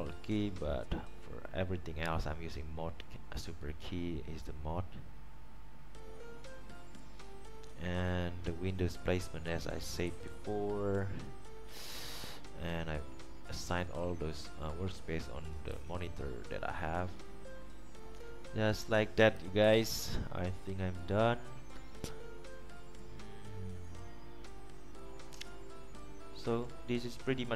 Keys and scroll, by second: 10.2 Right, 15.9 Right, 19.7-20.4 typing.